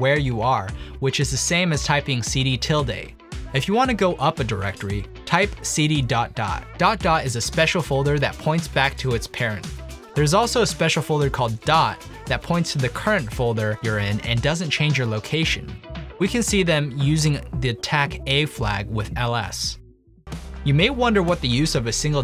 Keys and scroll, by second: 0.0-0.8 typing, 2.4 shift+`, 3.6 Return, 5.9 Return, 6.4-7.7 typing, 9.0 Return, 10.2-11.5 typing, 15.1-15.9 typing.